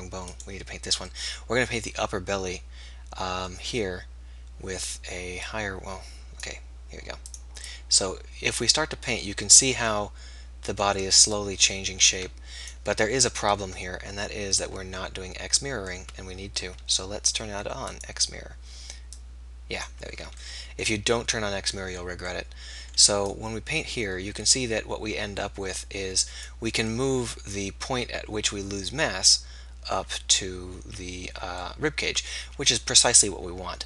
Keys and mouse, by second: 2.0-5.6 middle drag, 5.6-11.4 drag, 13.0 ctrl+z, 13.3 ctrl+z, 16.3 ctrl+z, 20.2 ctrl+z, 32.5 ctrl+z.